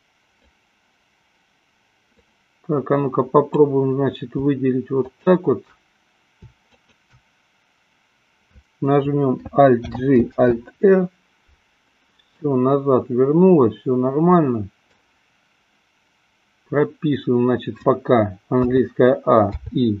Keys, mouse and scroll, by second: 0.0-1.0 drag, 2.4-3.9 drag, 5.2 shift+click, 6.9 shift+click, 10.0 alt+g, 10.7 alt+r, 12.5-15.3 middle drag, 18.8 a.